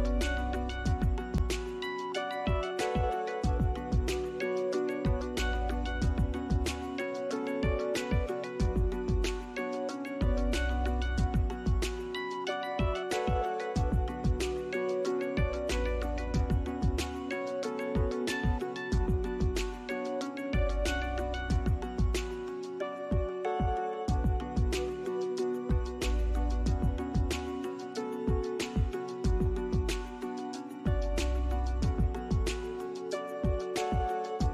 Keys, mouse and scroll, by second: 1.8 scroll up 1, 2.7 ctrl+click, 6.5 Return, 7.3 scroll up 1, 7.8 alt+middle click, 7.9 alt+scroll up 1, 8.7 alt+middle click, 10.8-11.3 scroll up 1, 15.2 double click, 16.4 scroll up 1, 17.0 alt+middle click, 18.3 alt+middle click, 19.5 alt+click, 19.8 alt+double click, 19.9 alt+click, 21.6 alt+click, 22.1 alt+middle click, 23.5 alt+middle click, 24.2-24.7 scroll up 1, 31.6 alt+middle click, 31.9 alt+click.